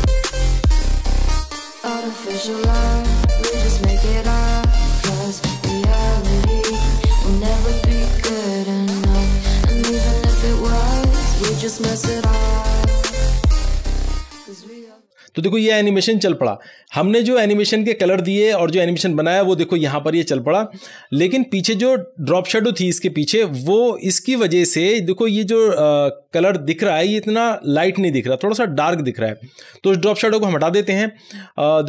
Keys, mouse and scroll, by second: 0.1 ctrl+v, 0.5 click, 1.0-3.9 typing, 1.7 click, 2.8 click, 3.9 Down, 5.1 click, 5.4 ctrl+s, 5.6-5.9 scroll up 1, 5.9 click, 6.6 Return, 7.5-10.1 typing, 10.1 click, 11.3-12.8 typing, 13.0 Return, 13.5 ctrl+s, 30.6 scroll up 1.